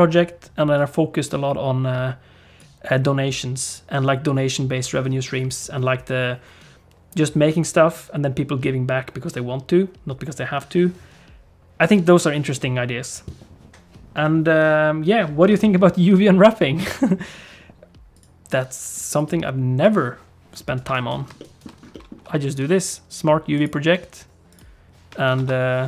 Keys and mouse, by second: 20.8 Tab, 21.4 middle click, 21.9 middle click, 22.2 u, 25.4 shift+F10.